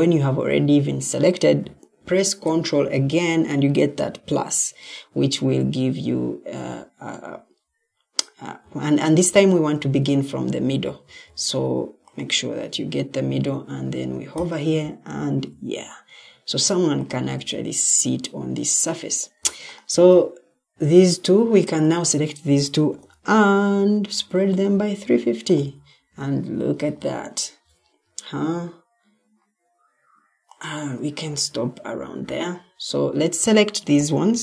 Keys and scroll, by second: 8.5 Escape, 9.7 Escape, 10.7 ctrl+d, 22.8 ctrl+u.